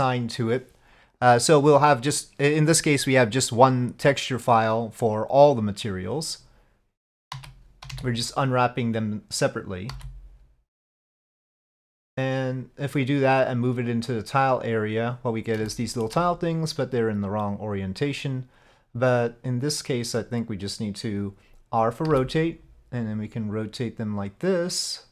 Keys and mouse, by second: 7.4 a, 7.9 s, 10.0 g, 19.9 click, 22.2 r.